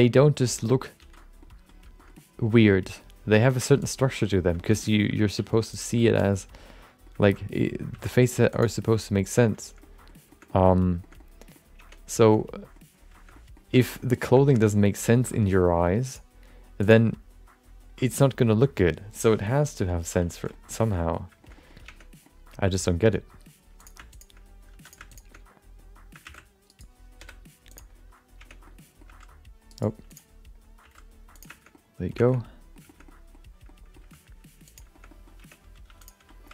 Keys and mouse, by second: 1.0 alt+z, 1.4 middle click, 2.0 shift+middle click, 2.1 middle click, 2.7 middle click, 3.3 g, 4.0 middle click, 4.5 shift+middle click, 4.7 middle click, 5.3 alt+z, 5.7 click, 6.0 alt+z, 6.2 middle click, 7.2 shift+middle click, 7.4 middle click, 7.9 g, 8.8 middle click, 9.8 middle click, 10.3 shift+middle click, 10.4 middle click, 11.0 shift+middle click, 11.3 middle click, 12.0 Tab, 12.3 middle click, 13.3 middle click, 13.8 shift+middle click, 13.9 middle click, 14.4 shift+middle click, 14.6 middle click, 15.1 shift+middle click, 15.3 middle click, 16.0 click, 20.5 middle click, 20.8 shift+middle click, 20.9 middle click, 21.4 shift+middle click, 21.5 middle click, 21.8 Tab, 22.2 middle click, 23.8 click, 24.1 shift+click, 24.7 3, 24.8 click, 25.1 shift+click, 26.2 shift+d, 27.2 p, 28.6 Tab, 28.6 middle click, 29.0 g, 30.8 g, 31.7 middle click, 32.2 shift+middle click, 32.5 middle click, 32.8 shift+middle click, 33.0 middle click, 33.6 middle click, 34.0 g, 34.9 shift+middle click, 35.1 middle click, 35.4 Tab, 35.8 2, 36.0 click, 36.3 middle click.